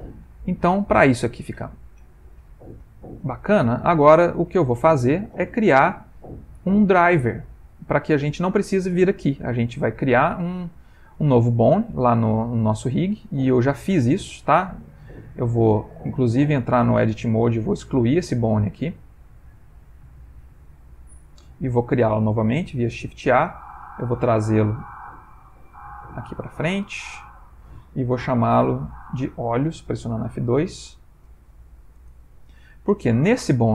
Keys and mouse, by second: 0.5 click, 1.7 click, 3.6 middle click, 4.4 ctrl+middle click, 4.9 middle click, 7.1 middle click, 10.0 middle click, 12.8 middle click, 12.8 click, 14.1 ctrl+middle click, 15.5 middle click, 17.0 Tab, 17.6 click, 18.5 x, 20.4 middle click, 22.6 shift+a, 23.7 click, 25.0 g, 28.7 F2, 33.2 middle click.